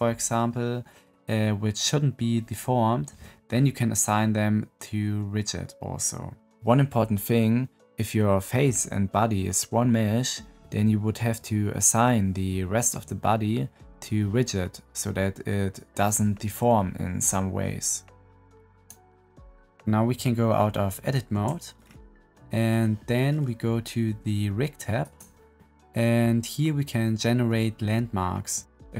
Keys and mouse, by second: 21.3 Tab, 22.4 middle click, 24.9 click.